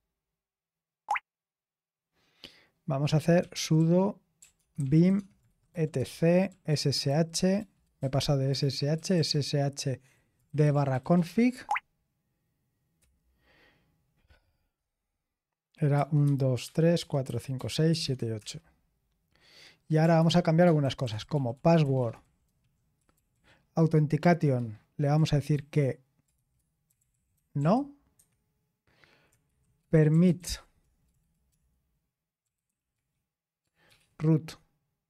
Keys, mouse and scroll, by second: 3.1-11.7 typing, 13.0 typing, 15.7-18.5 typing, 19.9-23.3 typing, 24.5-27.6 typing, 28.2 Escape, 29.2-32.7 typing, 33.9 typing.